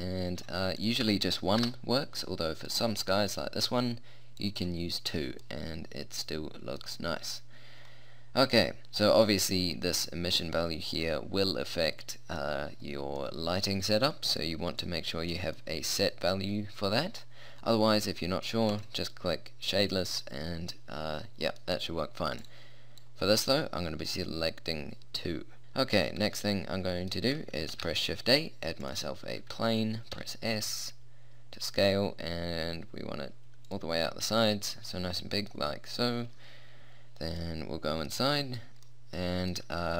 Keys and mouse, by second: 0.8-2.8 drag, 2.8-4.6 middle drag, 4.4-6.1 drag, 4.4 right click, 5.4-10.4 middle drag, 10.4-11.4 drag, 12.2 click, 14.0 middle click, 15.2 middle click, 16.6-18.8 middle drag, 18.8-20.4 drag, 20.5 middle click, 20.7-22.4 middle drag, 22.4-24.8 drag, 25.6 middle click, 27.8 shift+a, 30.2 s, 34.0 middle click, 35.6-37.6 middle drag, 38.1 middle click.